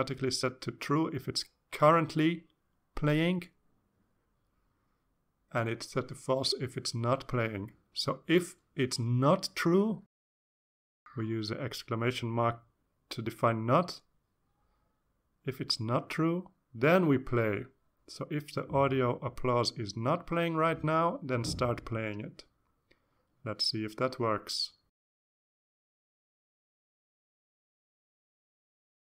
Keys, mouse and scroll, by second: 0.5 Return, 1.1 ., 2.1-3.0 typing, 4.2 Return, 5.5 shift+0, 7.3 Left, 7.8 Left, 9.4 Right, 9.8 Right, 13.8 shift+1, 14.1 Right, 14.6 Right, 16.2 Right, 16.5 Right, 17.6 shift+;, 19.7 Down, 19.9 Left, 20.4 Left, 21.8 Left, 22.6 Tab, 23.5 ctrl+s, 27.6 click.